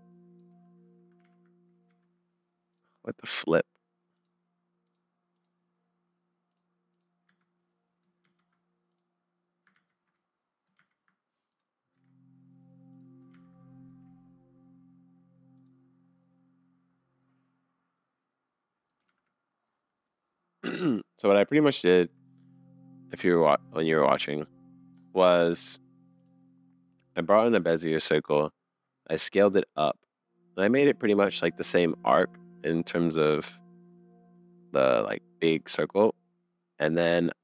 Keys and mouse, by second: 1.2 super+z, 1.9 Tab, 2.9 middle click, 4.9 click, 6.5 click, 7.3 Tab, 8.2 shift+s, 9.7 ctrl+z, 10.8 shift+s, 11.9 Tab, 13.3 shift+s, 18.1 click, 19.1 super+z, 19.9-20.7 middle drag, 21.7 shift+drag, 21.7-22.0 shift+middle drag, 22.3-23.3 middle drag, 27.1 middle click, 28.8 middle click, 29.2 middle click, 29.3 middle click, 30.2 middle click, 30.7 middle click, 30.8 middle click, 31.8-32.9 middle drag, 34.4 middle click, 34.9-36.1 middle drag.